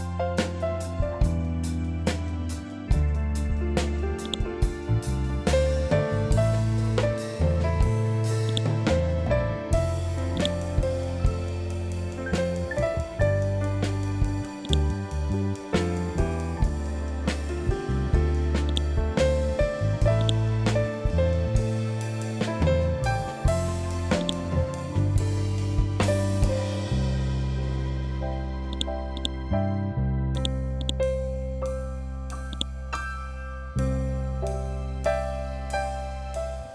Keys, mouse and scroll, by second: 2.1 scroll up 1, 3.7-6.1 drag, 8.0-13.6 drag, 14.1-18.1 drag, 18.1-21.5 drag, 21.5 scroll up 1, 23.7-26.3 drag, 26.3 scroll down 1, 28.2 click, 32.6 scroll down 1, 34.5 scroll up 1, 36.2 shift+click.